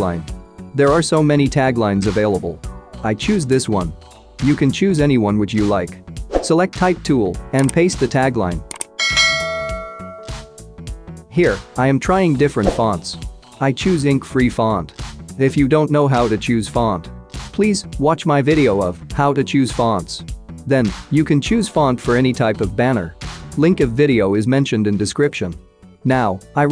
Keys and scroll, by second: 4.5 ctrl+c, 21.1-21.9 typing, 25.7 Delete, 26.2 ctrl+c.